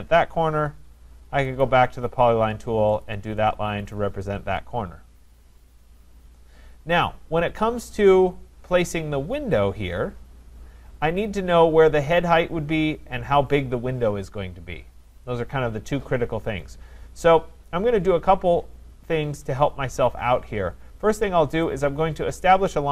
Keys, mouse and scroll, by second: 1.6 click, 3.0 click, 4.0 click, 4.4 Return, 19.0-21.8 scroll, 21.8 click.